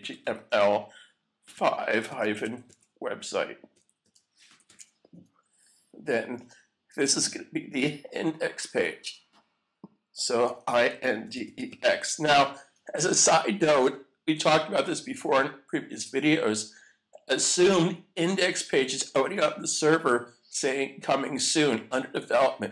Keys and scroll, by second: 0.0-6.5 typing, 10.2-12.2 typing.